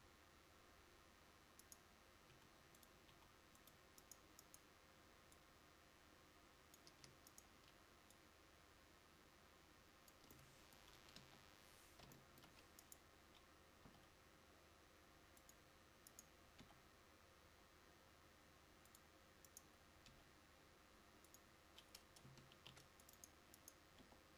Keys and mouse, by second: 0.0 s, 11.3 KP_1, 14.0 g, 16.7 g, 20.2 click, 20.2 g, 22.7 ctrl+r, 24.1 h.